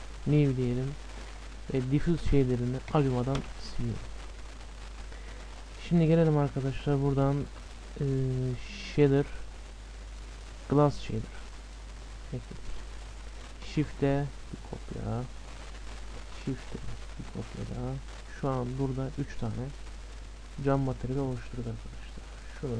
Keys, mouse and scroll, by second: 0.2-2.1 drag, 0.2 right click, 0.9-6.3 middle drag, 2.9-4.7 drag, 3.5 Delete, 7.5 shift+a, 12.1-14.5 middle drag, 13.7 shift+d, 15.6-17.6 middle drag, 19.0-20.9 middle drag, 21.7-22.5 scroll up 1, 22.5-22.7 drag, 22.5-22.7 scroll up 1.